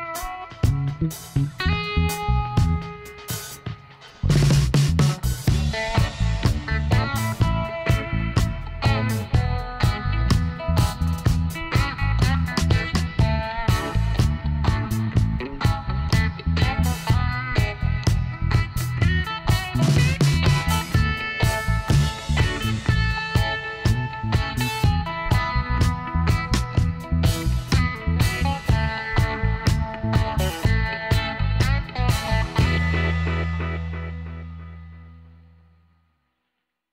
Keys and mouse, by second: 2.9-4.7 drag, 4.7 s, 9.9-11.8 right drag, 12.4-13.7 right drag, 13.7-17.5 middle drag, 14.7 z, 18.0-21.3 middle drag, 20.2 t, 22.1 KP_7, 24.1 s, 29.9 middle click, 31.2 ctrl+r, 32.5 g, 36.0 s.